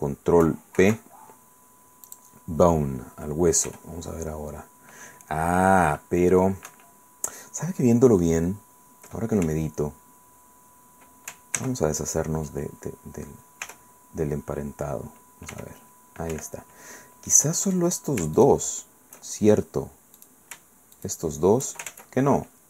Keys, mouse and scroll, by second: 0.8 ctrl+p, 2.1 click, 3.7 r, 6.7 Escape, 9.4 z, 11.6 ctrl+z, 13.6 t, 15.5 r, 16.3 Escape, 17.3 middle click, 18.4 shift+right click, 20.2 right click, 20.9 shift+right click, 21.9 ctrl+shift+z.